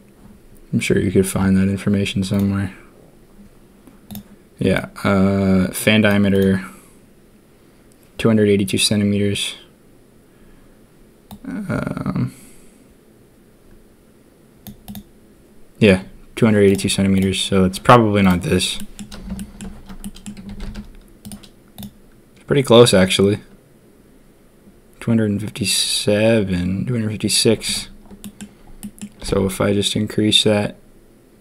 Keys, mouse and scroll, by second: 17.1 click, 18.2 click, 18.7 drag, 19.3 shift+drag, 20.0 click, 20.4 s, 21.7-28.3 drag, 28.8 click, 29.2 s.